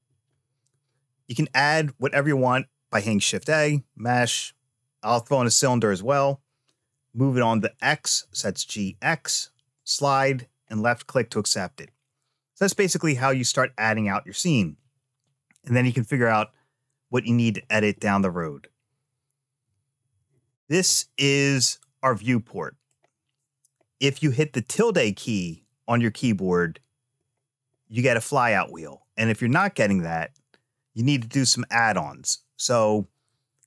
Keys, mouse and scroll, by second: 3.0 shift+a, 8.0 g, 10.6 middle click, 12.6-15.6 middle drag, 21.4-22.7 middle drag.